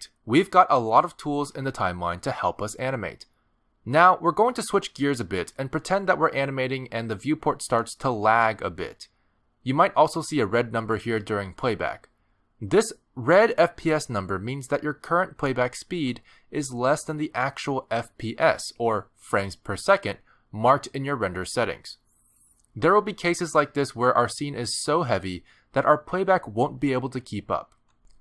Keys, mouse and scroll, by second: 18.5 click, 19.2 click.